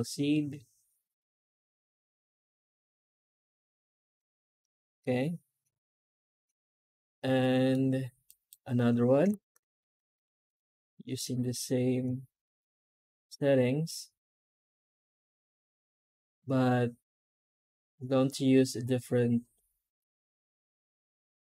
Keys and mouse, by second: 4.5-7.6 middle drag, 8.2 click, 8.6 Tab, 9.2 alt+shift+z, 10.2 shift+q.